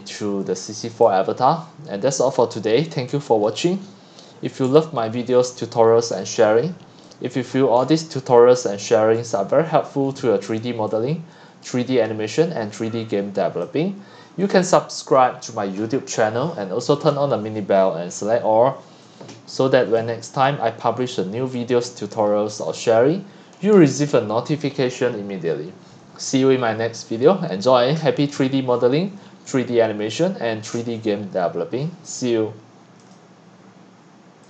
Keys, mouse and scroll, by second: 0.7 click, 0.9-3.1 scroll down 57, 3.1-3.5 drag, 4.4-5.7 typing, 7.0 click, 7.5-9.3 scroll down 16, 9.3-10.4 scroll up 21, 10.7 scroll down 3, 13.6-18.1 drag, 18.6-20.2 scroll up 7, 20.2-20.8 scroll up 1, 20.8-21.5 scroll up 1, 21.5 drag, 21.9-22.7 scroll up 6, 22.7-23.0 scroll down 2, 23.0 scroll, 33.0 click, 34.4 click.